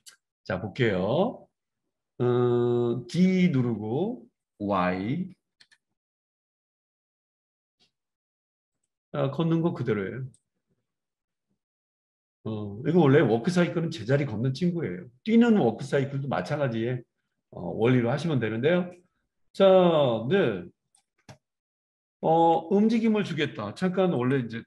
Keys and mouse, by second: 0.0-16.2 middle drag, 3.1 g, 10.3-22.4 drag, 22.4-23.4 right drag, 23.4-24.6 middle drag.